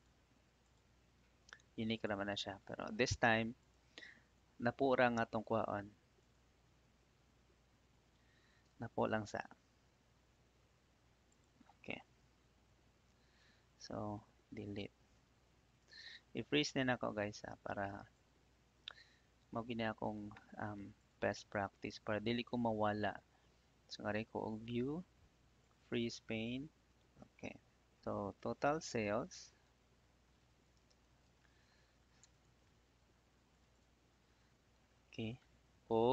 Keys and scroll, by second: 9.1 shift+Up, 12.1 ctrl+shift+Down, 13.0 Delete, 13.9 ctrl+Up, 28.0 Up, 29.2 shift+t, 29.6 o, 30.7 space, 31.2 shift+s, 31.4 a, 32.2 Tab.